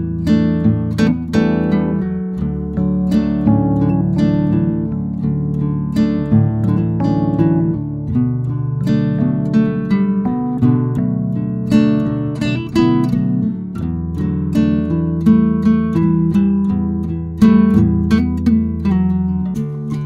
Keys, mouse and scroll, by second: 1.3 scroll up 2, 1.5 middle click, 1.7 scroll down 2, 2.0 middle click, 2.3-3.1 scroll up 2, 3.1 middle click, 3.5 c, 5.3 scroll down 2, 5.5 middle click, 6.0-6.6 scroll up 1, 6.6 click, 7.4 Return, 7.9 click, 8.4 scroll down 2, 8.5 middle click, 9.1-10.0 scroll up 2, 9.3 middle click, 10.0 middle click, 10.9 c, 12.3 click, 12.5 scroll down 3, 12.7-14.2 middle drag, 14.2-16.5 drag, 16.5-18.0 middle drag.